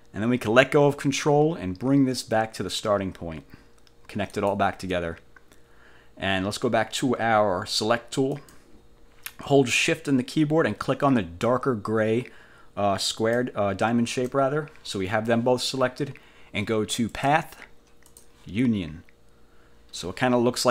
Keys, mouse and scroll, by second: 4.4 click, 8.5 click, 13.2 shift+click, 17.2 click, 18.2 click.